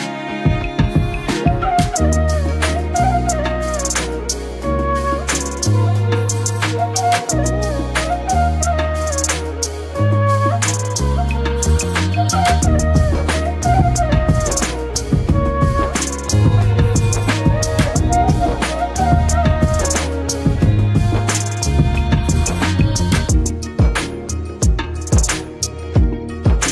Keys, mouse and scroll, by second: 1.7 Delete, 2.6 ctrl+d, 3.6 ctrl+-, 5.1-7.9 drag, 13.4 click, 14.7 click, 17.9-21.3 drag.